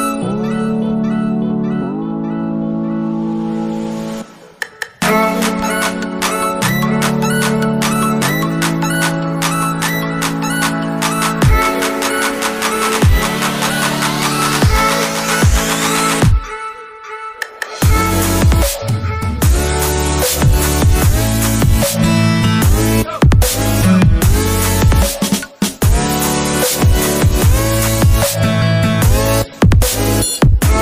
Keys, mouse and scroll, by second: 2.1 typing, 9.3 alt+Tab, 13.9 double click, 15.6 Escape, 22.8 double click.